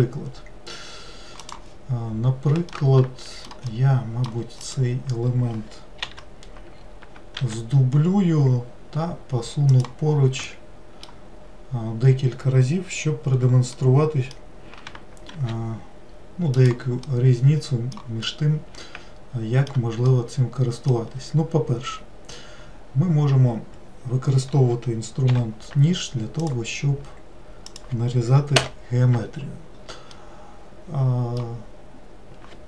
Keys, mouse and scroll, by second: 2.8-4.7 middle drag, 4.7 click, 6.0 l, 7.4 shift+d, 10.5 shift+middle click, 11.4-13.0 scroll down 1, 13.0-13.8 scroll down 1, 13.8-15.4 middle drag, 15.4 shift+d, 17.1-22.7 middle drag, 22.7-23.6 scroll up 1, 25.3 k, 30.2-32.6 middle drag.